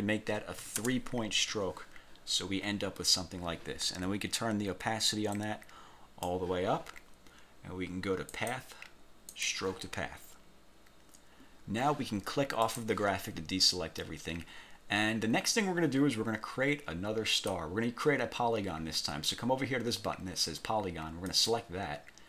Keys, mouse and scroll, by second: 0.7 3, 0.9 Return, 5.4 click, 8.4 click, 9.4 click, 12.7 click, 14.1 scroll down 1, 15.2 scroll down 1, 17.4 click, 21.4 click.